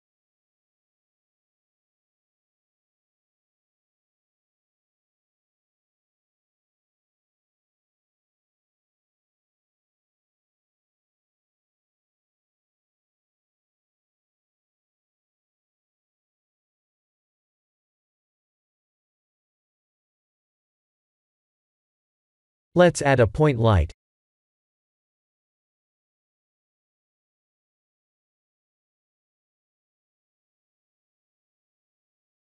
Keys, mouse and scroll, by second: 8.1-8.6 scroll down 7, 8.9 click, 9.9 click, 13.0 click, 15.5 click, 16.3 click, 18.6 click, 19.4 click, 21.5 click, 25.3 click, 28.5 click, 29.3 click.